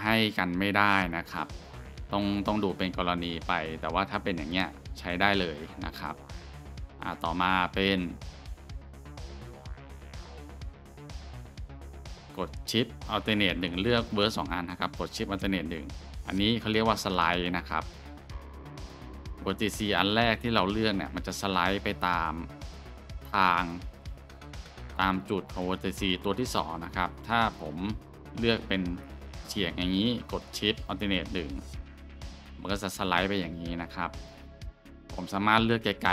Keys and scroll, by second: 1.7-2.9 scroll, 4.8 scroll, 7.8 scroll, 9.1-9.6 shift+scroll, 9.8 shift+scroll, 15.5 alt+shift+1, 31.0 alt+shift+1.